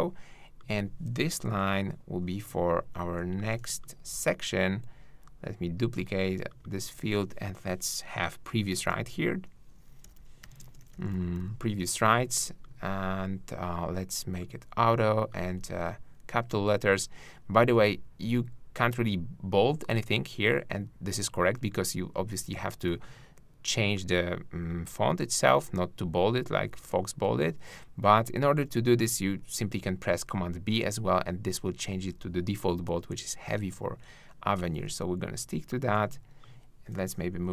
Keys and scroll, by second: 1.4 shift+Down, 30.0 super+b, 37.3 shift+Down.